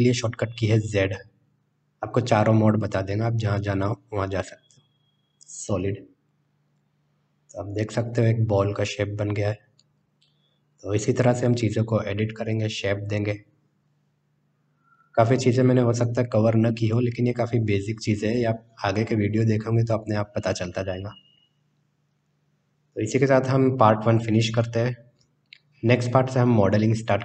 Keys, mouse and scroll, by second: 0.2 z, 6.9-12.4 middle drag.